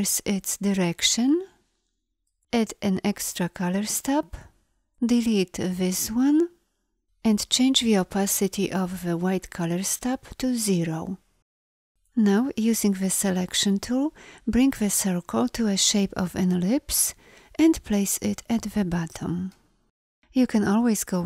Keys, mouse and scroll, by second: 13.3 v, 18.1 drag, 18.3 click, 18.5 click, 20.7 click.